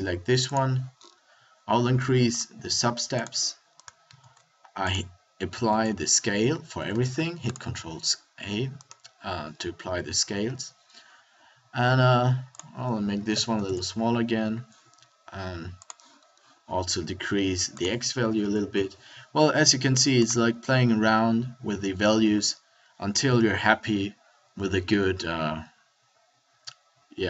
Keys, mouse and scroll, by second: 4.1 ctrl+a, 5.6 ctrl+a, 6.5 a, 6.6 a, 22.5 a, 23.4 KP_1, 24.9-25.9 middle drag.